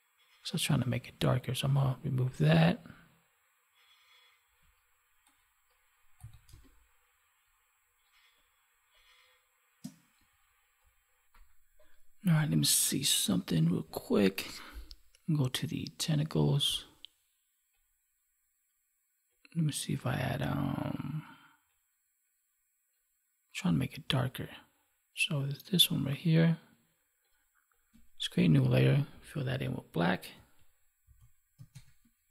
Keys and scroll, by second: 5.2 ctrl+=, 6.4 space, 31.7 alt+BackSpace.